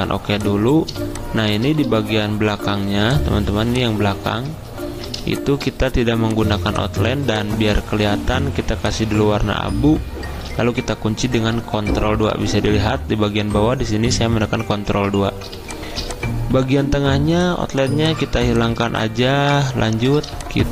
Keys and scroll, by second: 2.9 v, 4.1 ctrl+z, 11.6 ctrl+2.